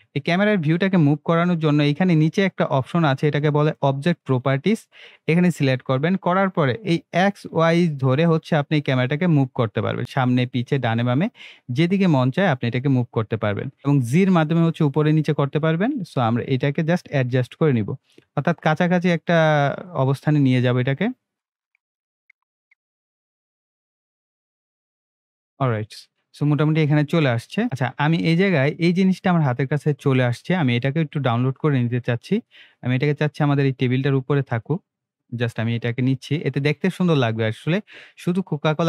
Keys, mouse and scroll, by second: 4.2 click, 7.1-8.7 drag, 14.8-15.7 drag, 32.3 click.